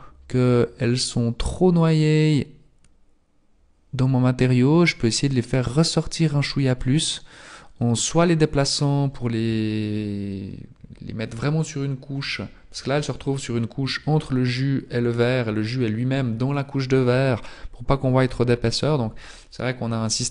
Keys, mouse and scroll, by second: 7.1-7.8 scroll down 3, 7.8-9.2 scroll down 1.